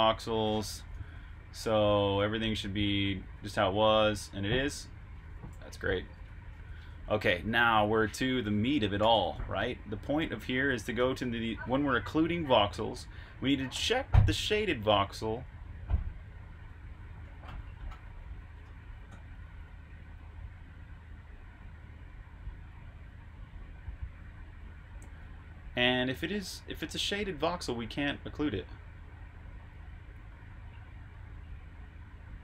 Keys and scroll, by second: 0.6-9.0 typing, 6.7 super+q, 10.5-11.8 typing, 13.0 j, 15.2-16.4 typing, 26.5-28.0 typing, 30.0 typing.